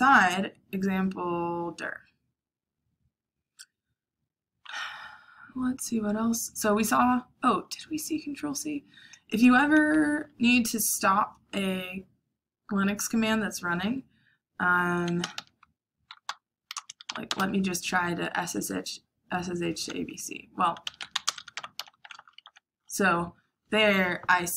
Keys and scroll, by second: 15.1-17.7 typing, 20.5-22.2 typing, 22.4 ctrl+c.